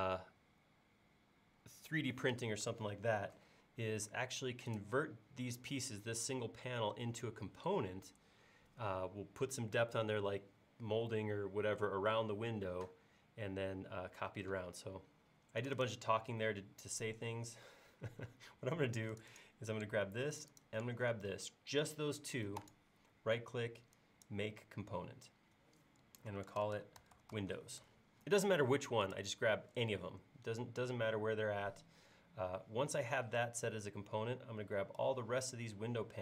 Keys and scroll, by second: 26.3-27.3 typing.